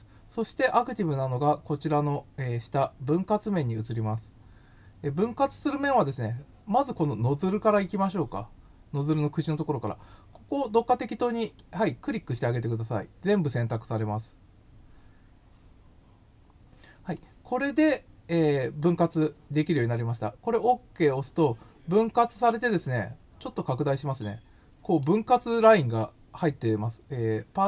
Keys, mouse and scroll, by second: 11.4 click, 17.1-19.0 middle drag, 20.5 click, 23.2 scroll up 1, 23.4-23.8 scroll down 3, 24.1 middle click.